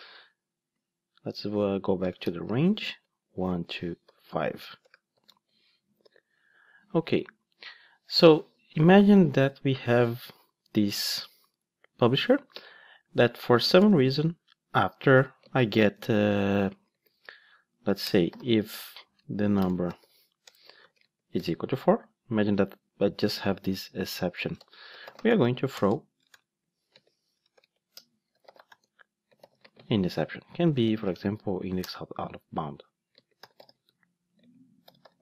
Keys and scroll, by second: 2.9 Return, 14.4 Return, 24.6 Return, 26.3 alt+BackSpace, 31.8 Return, 34.8 Return.